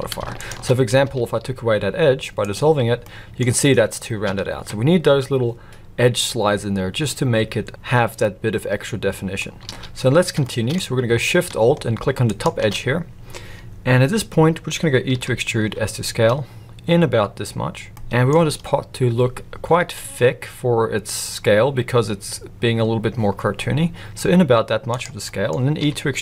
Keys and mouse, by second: 0.4 alt+shift+click, 1.0 x, 3.0 middle click, 4.4 ctrl+z, 8.2-9.4 middle drag, 9.7 alt+a, 10.4 shift+middle click, 12.3 alt+shift+click, 15.1 e, 17.9 middle click, 19.8 s, 25.2 middle click, 25.8 e.